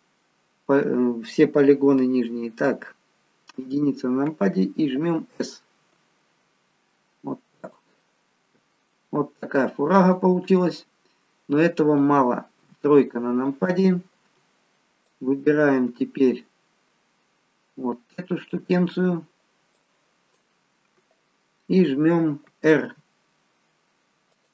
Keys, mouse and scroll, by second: 3.5 KP_1, 5.9 s, 8.0 middle click, 10.1 click, 12.7 KP_3, 15.1 ctrl+click, 19.7 click, 23.2 r.